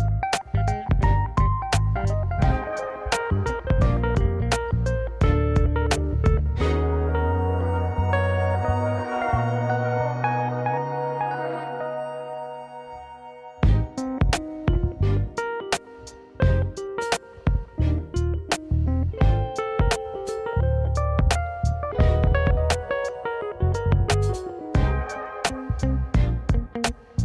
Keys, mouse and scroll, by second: 0.0 r, 1.1-2.1 middle drag, 2.3-3.2 middle drag, 3.2 click, 3.6 r, 4.1 click, 4.2-5.2 middle drag, 5.5 middle click, 5.8 click, 7.6 alt+d, 10.7-13.7 typing, 12.6 click, 13.5 click, 14.1 drag, 14.3-15.7 middle drag, 16.6-19.2 middle drag, 19.2 click, 19.6 r, 20.1 click, 20.2-21.0 middle drag, 21.0 click, 21.9 r, 22.6 click, 22.8-24.1 middle drag, 24.1 ctrl+s, 25.5-26.9 middle drag.